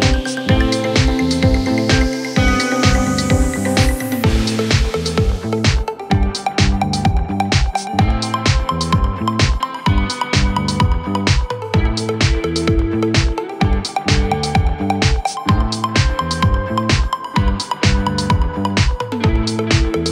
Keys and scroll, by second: 0.2 Escape, 5.8 shift+F2, 6.6 Right, 7.5 F3, 8.1 Escape, 9.1 shift+F2, 9.4 Escape, 14.8 shift+Page_Down.